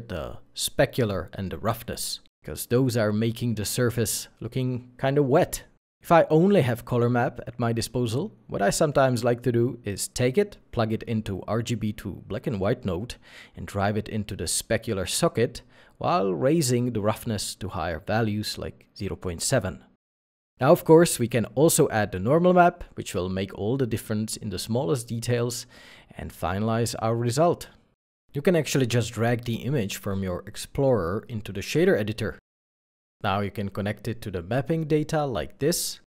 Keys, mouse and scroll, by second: 0.4-1.0 scroll up 1, 2.3 space, 9.6 shift+a, 10.7 b, 10.8 w, 18.2 ., 18.3 7, 18.5 Return, 19.2 middle click, 19.8 scroll, 20.1 alt+a, 20.6 middle click, 23.9 middle click, 27.0-27.5 scroll down 1.